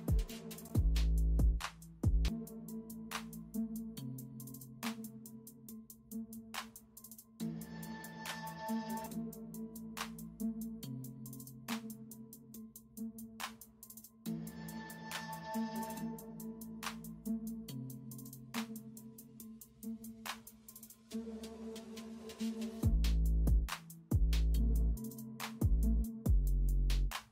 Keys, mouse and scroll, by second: 2.5 space, 2.8 ctrl+alt+z, 2.9 space, 5.0-7.0 typing, 9.2-10.3 typing, 12.6 space, 15.6 space, 19.8-20.7 typing, 22.0 [, 27.2-27.3 typing.